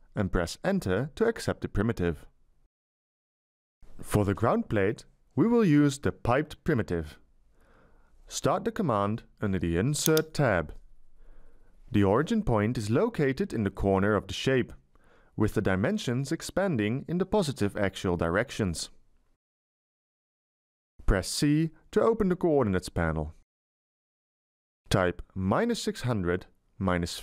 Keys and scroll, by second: 0.9 Return, 6.2 Escape, 21.9 c, 23.8 Delete, 25.2-27.0 typing.